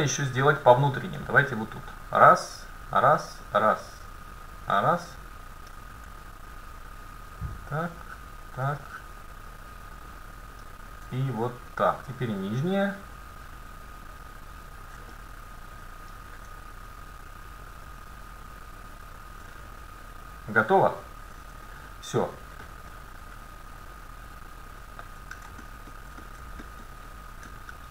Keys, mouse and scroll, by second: 0.3-4.3 middle drag, 1.8-6.7 right drag, 4.9-6.7 middle drag, 6.8-10.3 right drag, 8.8-10.6 middle drag, 11.7-16.9 right drag, 15.2-16.2 middle drag, 16.9-20.0 middle drag, 19.7-20.9 right drag, 20.0 click, 20.1-21.5 middle drag, 22.7-24.5 middle drag, 25.7-26.7 middle drag, 26.7-27.7 scroll down 1, 27.7-27.9 scroll down 1.